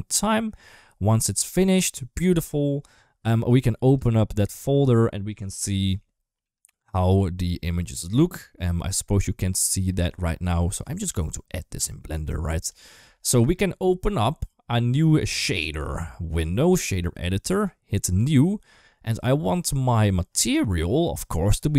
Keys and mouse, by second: 3.7 click, 9.3-10.6 drag, 11.6 click, 15.4-16.6 drag, 17.9 click, 19.3 click, 20.6 middle click.